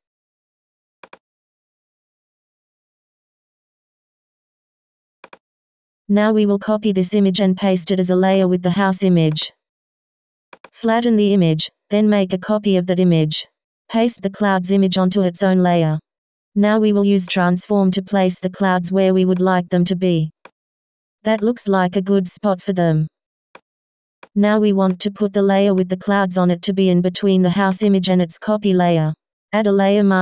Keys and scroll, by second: 6.6 super+a, 15.7 super+t, 22.0 Return, 29.7 w.